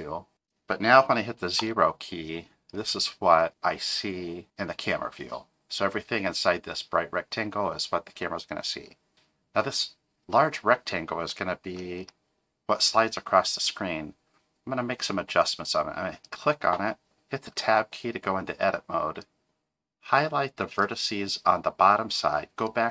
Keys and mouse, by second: 1.6 KP_0, 11.5 middle click, 17.6 Tab, 19.2-22.9 drag.